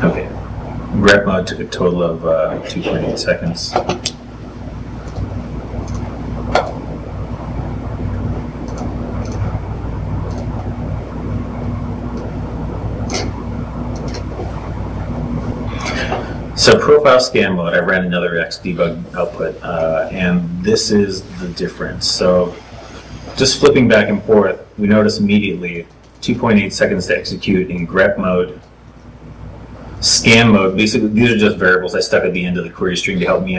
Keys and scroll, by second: 1.7 super+t, 2.3 super+t, 22.8 ctrl+shift+Tab, 27.6 ctrl+Tab.